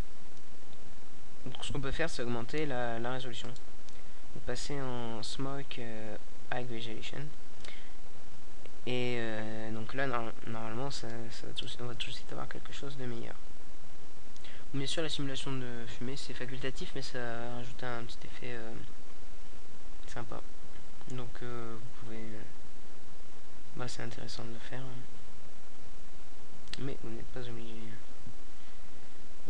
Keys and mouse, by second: 3.7 alt+a, 3.7 click, 19.4 alt+a, 27.9 right click, 28.5-29.4 middle drag.